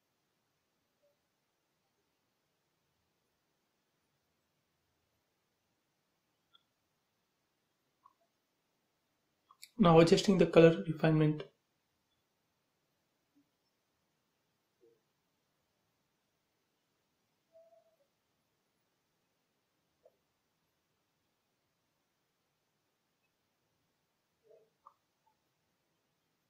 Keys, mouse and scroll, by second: 18.5-18.9 scroll down 1, 19.0 space, 20.4-20.8 scroll down 1, 22.6-26.4 drag.